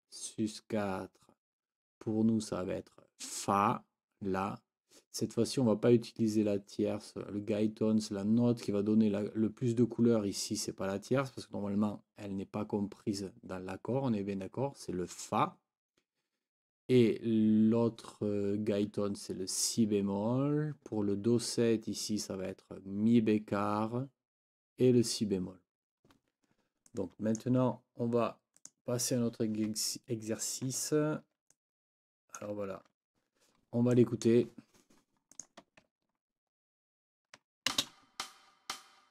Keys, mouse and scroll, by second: 26.9 click, 27.1-27.6 scroll up 1, 28.6 click, 31.0 ctrl+middle click, 31.2 ctrl+scroll up 1, 31.5 ctrl+click, 36.9 ctrl+middle click, 37.7 ctrl+space.